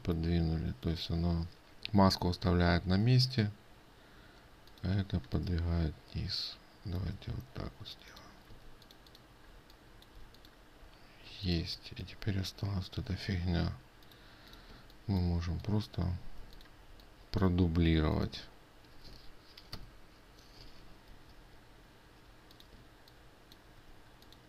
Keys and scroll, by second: 9.1 ctrl+space, 21.7 ctrl+z.